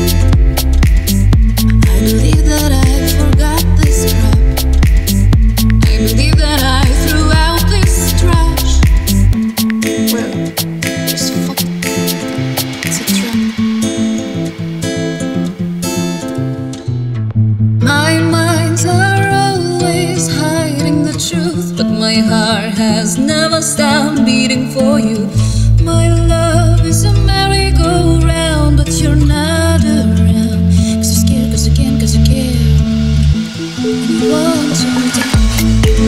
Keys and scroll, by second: 3.6 BackSpace, 7.4 Left, 11.6-12.3 typing, 17.4 4, 17.5 Return, 28.2 super+s, 32.7 super+c, 33.3 super+v, 34.7 BackSpace.